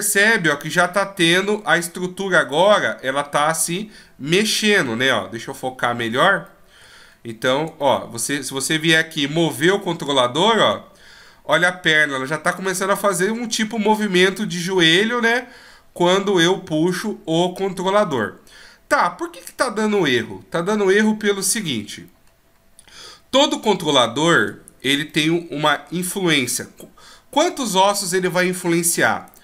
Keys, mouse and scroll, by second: 5.8-6.4 scroll down 1, 6.4 middle click, 6.4-7.0 scroll down 2, 7.0-7.3 shift+scroll up 1, 7.7 shift+scroll up 4, 7.8 middle click, 8.8 g, 22.3-23.7 scroll up 1, 23.9-24.3 shift+scroll down 1, 25.1 middle click, 25.1-25.5 shift+scroll down 5, 29.3 right click.